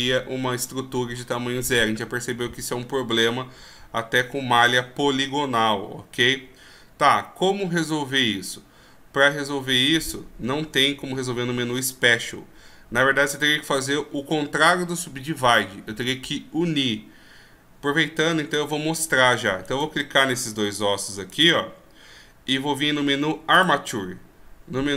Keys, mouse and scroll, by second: 11.7 w, 19.9 right click, 21.6 shift+right click, 24.2 click.